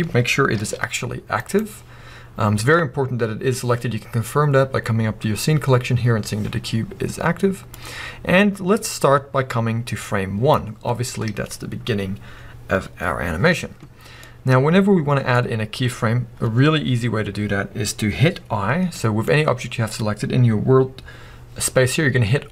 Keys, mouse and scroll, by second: 0.6 g, 1.5 right click, 7.7-14.2 drag, 14.2-18.8 middle drag.